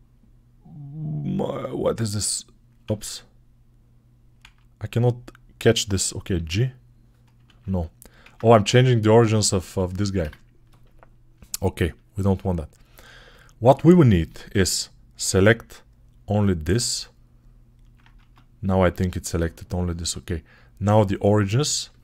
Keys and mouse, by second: 2.9 click, 4.3 ctrl+z, 6.2-8.1 drag, 6.2 g, 8.2 ctrl+click, 8.4 click, 9.4 click, 9.7 click, 11.9 middle click, 13.1-17.2 ctrl+alt+middle drag, 16.1 right click, 17.4 ctrl+alt+middle click, 18.0 Tab, 19.0 shift+click, 19.8-22.0 middle drag, 19.8 Tab, 20.8 click.